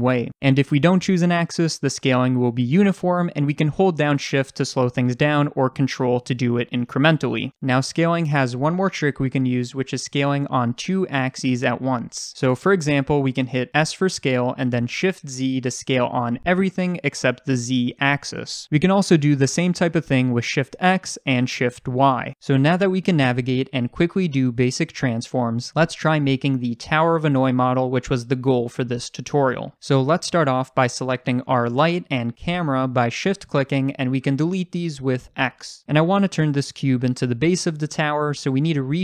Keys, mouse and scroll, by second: 0.9 click, 1.2 ctrl+z, 1.5 s, 7.3 ctrl+click, 7.6 ctrl+z, 13.7 s, 18.5 ctrl+z, 19.0 s, 22.3 ctrl+z, 31.5 click, 32.4 shift+click, 35.0 x, 36.3 click.